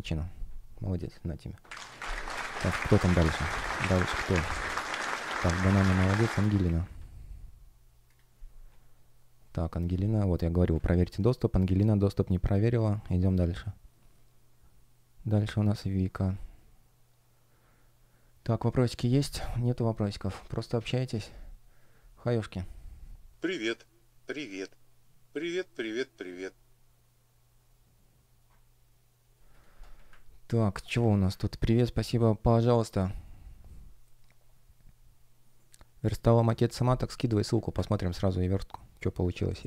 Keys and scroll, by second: 10.4 super+w, 30.7 space, 31.2 super+space, 36.9 space, 37.6 super+space.